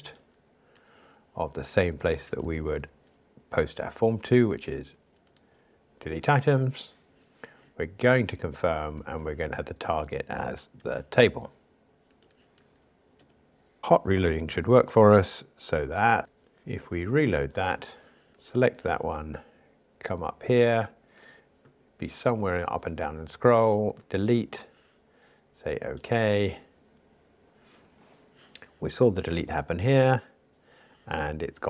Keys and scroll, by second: 0.7 super+c, 2.9 super+v, 5.1 alt+Up, 5.4 super+v, 10.7 super+c, 12.6 super+v.